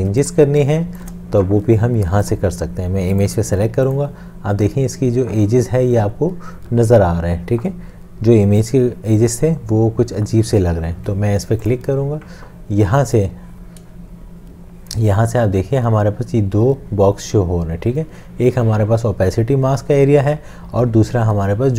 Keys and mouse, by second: 0.1 space, 0.9 click.